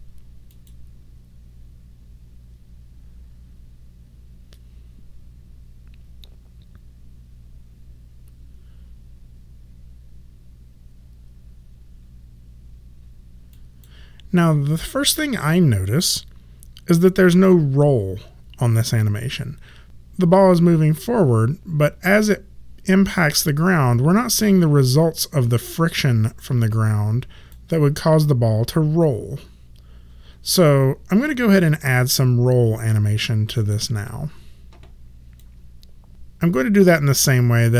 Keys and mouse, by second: 13.5 click, 20.3 click, 33.5 click.